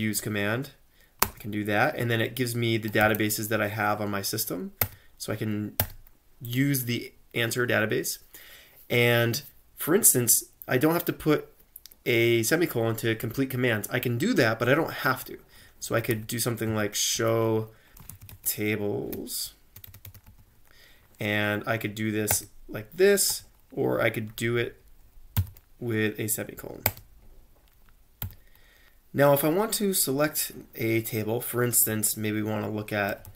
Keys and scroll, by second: 1.3 space, 2.6-3.4 typing, 4.8 Return, 5.8 Return, 15.9-20.3 typing, 17.2 Tab, 22.3 Return, 23.3 q, 24.5 Up, 25.4 ;, 26.9 Return, 27.6-28.3 typing, 32.8-33.3 typing.